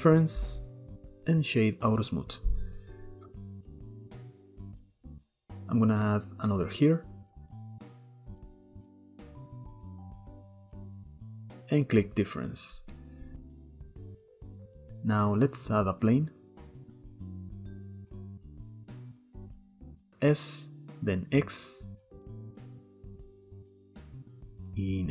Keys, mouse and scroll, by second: 0.7 click, 1.4-3.3 right drag, 3.3-4.5 middle drag, 4.5-5.3 scroll up 2, 5.3-6.4 drag, 9.2 click, 9.7 middle click, 10.3 click, 10.9 shift+middle click, 11.9-12.9 drag, 12.9 right click, 14.1-14.9 scroll down 6, 14.9-15.3 scroll up 1, 15.3 middle click, 16.2 shift+a, 17.5 middle click, 18.0 s, 19.6 s, 23.2 click, 23.8 shift+middle drag, 24.1 s, 24.6 Tab.